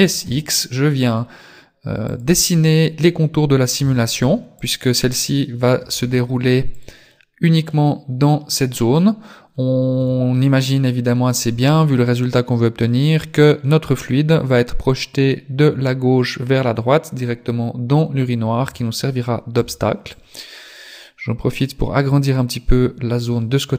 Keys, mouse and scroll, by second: 3.8 a, 4.2 b, 5.8 g, 7.2 middle click, 10.0 KP_3, 18.6 a, 19.6 b, 22.0 click.